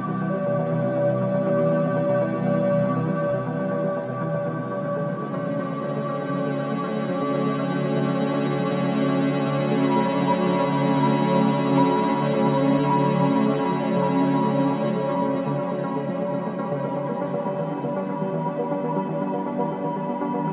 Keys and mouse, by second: 1.1-4.2 right drag, 8.4 ctrl+1, 12.2 click, 18.0 shift+d.